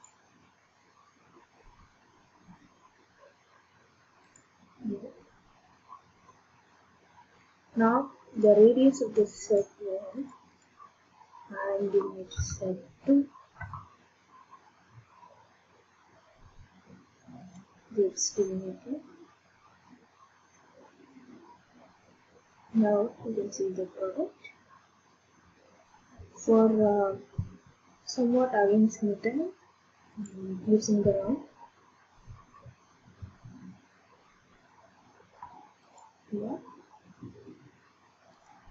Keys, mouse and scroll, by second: 0.2 ctrl+click, 4.5 ctrl+click, 9.6 click, 10.3 click, 10.6 click, 12.3 2, 13.6 Return, 17.6 click, 25.6 middle click, 30.3 click, 35.5 click, 36.0 ctrl+click, 37.0 ctrl+click, 38.5-38.7 ctrl+drag.